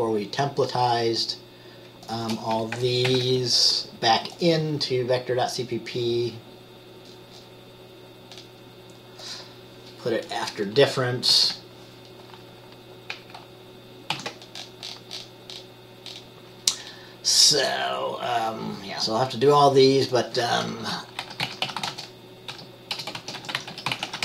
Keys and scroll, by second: 3.2 ctrl+c, 10.9 Return, 11.4 ctrl+v, 14.2 ctrl+s, 21.0 Return, 21.4-24.2 typing.